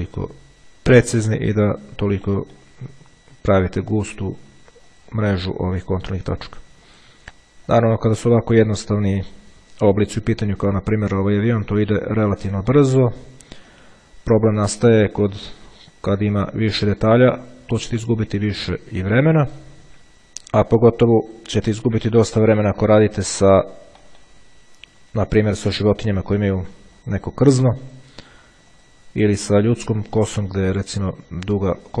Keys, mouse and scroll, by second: 0.6 click, 2.0 click, 5.1 click, 7.1 click, 7.9 click, 9.1-10.0 drag, 11.4 click, 12.2 click, 13.9 click, 15.2 click, 16.3 click, 17.4 click, 18.7 click, 19.6-20.7 drag, 20.9-22.1 drag, 22.8 click, 23.4-24.9 middle drag, 27.2 click, 28.0 click, 28.9 click, 30.2 click, 31.6-32.0 drag.